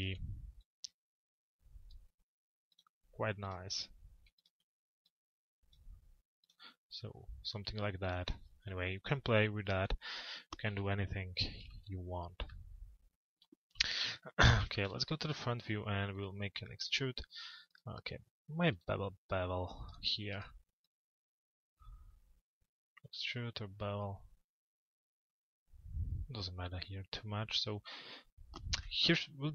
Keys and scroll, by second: 10.3 p, 14.0 z, 28.4 p.